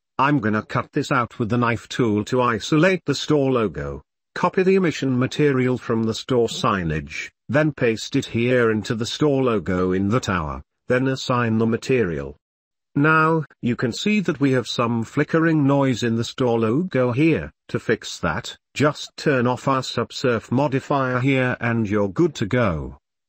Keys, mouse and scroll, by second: 7.6-8.3 drag, 8.9 Tab, 10.1 click, 11.7-12.3 drag, 13.4 click, 14.3 Tab, 14.7-15.7 middle drag, 17.6 click, 17.9 click, 19.2-21.2 drag, 22.7 click.